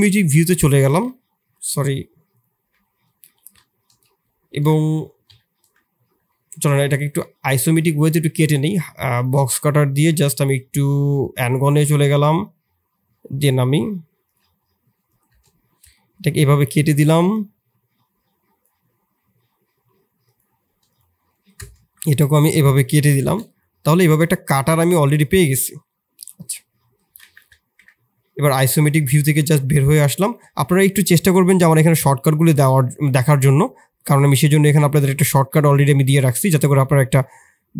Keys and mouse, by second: 1.5-2.4 drag, 1.5 /, 3.4 KP_3, 3.8 KP_1, 5.2 ctrl+KP_1, 6.2 shift+middle drag, 10.4 d, 12.4-22.1 drag, 22.1 middle drag, 22.8 shift+z, 23.2 shift+z, 23.3-24.1 middle drag, 24.6-25.1 middle drag, 29.1 KP_1, 30.3 KP_3, 32.5 shift+middle click, 35.7 shift+middle click, 36.1 shift+z, 36.8 shift+drag.